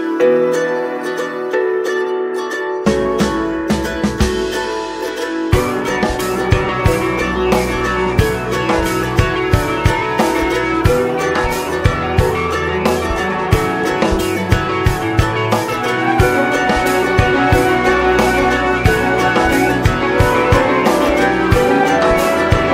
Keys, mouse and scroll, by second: 1.9 middle click, 2.4 click, 2.9 click, 3.7-5.5 drag, 5.5 space, 6.0 space, 6.8-9.5 drag, 9.5-11.2 scroll down 3, 11.2-20.7 drag, 20.7-21.5 scroll down 1, 21.5 click, 22.2-22.7 scroll down 1.